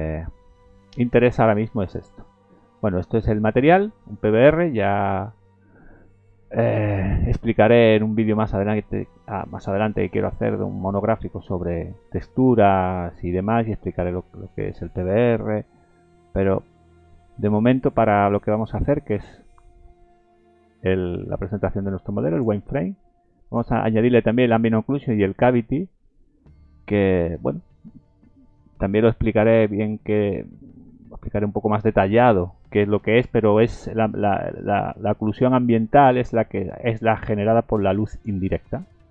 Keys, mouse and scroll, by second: 0.1 middle click, 0.8-1.6 scroll down 7, 1.8 middle click, 2.4 scroll up 3, 2.7 middle click, 3.3-4.0 scroll up 3, 3.8 middle click, 4.3-4.6 scroll up 3, 4.9 middle click, 7.6-8.7 scroll down 8, 8.7 middle click, 18.2-18.8 scroll up 3, 18.8 scroll down 4, 21.2 click, 21.2 scroll down 1, 23.1 click, 23.8-24.3 scroll up 2, 24.7 scroll up 1, 25.0 middle click, 26.1 scroll down 2.